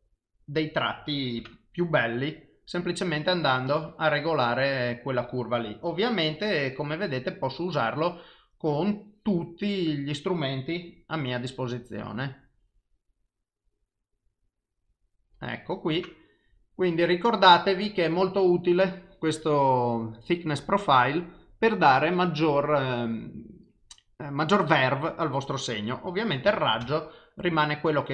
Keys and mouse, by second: 6.4 click, 8.8 click, 25.9 click.